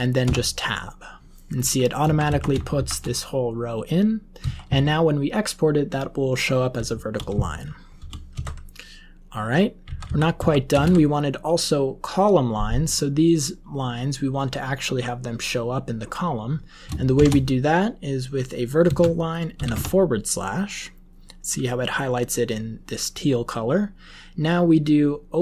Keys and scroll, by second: 0.2 Tab, 1.5 Up, 2.0 Left, 2.2 Left, 2.7 shift+End, 4.3 Down, 4.6 Down, 6.8 Left, 7.2 Down, 7.9 Home, 8.2 Right, 9.8 Up, 10.0 Up, 10.3 Left, 10.6 Return, 10.7 Up, 18.8 space, 19.5 /, 19.7 Tab.